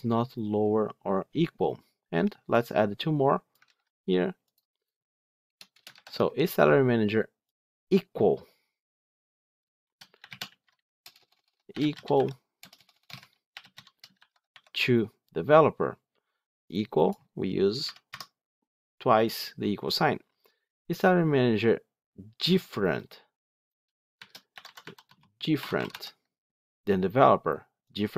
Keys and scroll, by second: 3.5 ctrl+c, 5.8 ctrl+v.